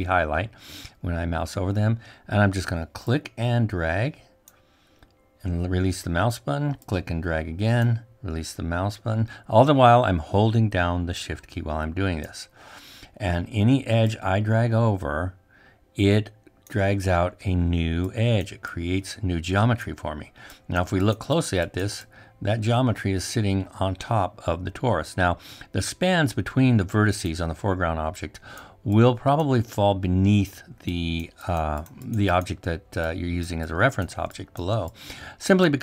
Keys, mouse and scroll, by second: 2.9-5.1 shift+drag, 7.1-9.0 shift+drag, 11.6-13.8 shift+drag, 14.5-16.8 shift+drag.